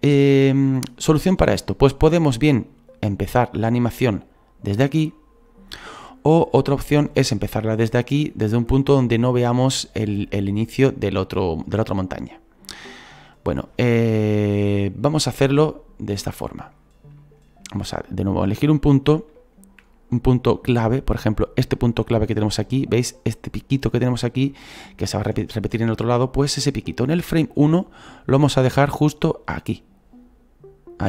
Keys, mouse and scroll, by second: 15.7 scroll up 2, 16.2 shift+middle click, 16.8 scroll up 2, 17.2-18.4 shift+middle drag, 18.4 scroll up 2, 18.9 scroll up 2, 19.3 shift+middle click, 20.0 scroll up 2, 20.6-24.5 scroll down 1, 24.5-28.4 shift+middle drag, 28.4-31.0 drag.